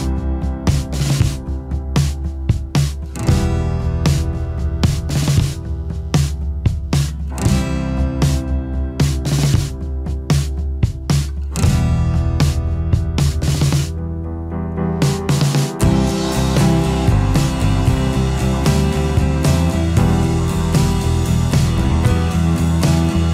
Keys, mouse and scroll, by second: 14.4 ctrl+8.